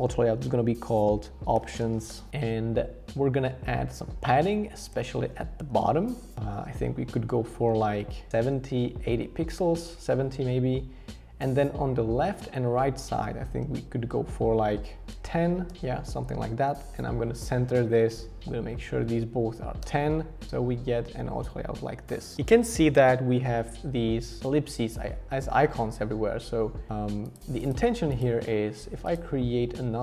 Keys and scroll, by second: 1.2-2.3 typing, 4.7 shift+Up, 4.9 shift+Up, 5.1 shift+Up, 5.7 shift+Up, 5.8 shift+Up, 6.5 shift+Up, 7.8 shift+Up, 9.6 shift+Down, 13.2 shift+Page_Up, 13.4 shift+Page_Up, 15.1 Down, 15.1 Up, 15.7 Return, 18.4 shift+Down, 19.8 Return.